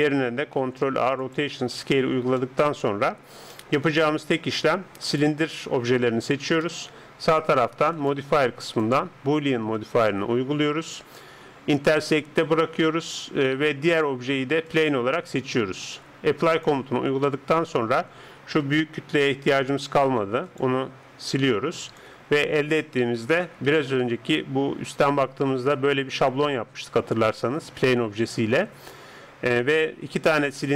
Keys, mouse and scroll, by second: 0.5 ctrl+a, 1.7-2.8 middle drag, 3.2-6.5 middle drag, 5.1 right click, 6.7-9.8 middle drag, 7.9-18.4 drag, 17.3-19.7 middle drag, 18.6 right click, 19.7 g, 21.3 x, 22.7 right click, 23.7 KP_7.